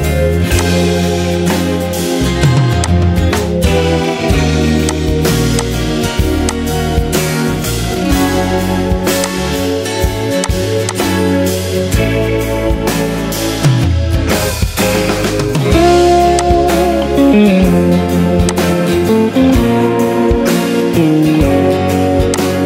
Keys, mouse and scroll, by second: 13.7 ctrl+z.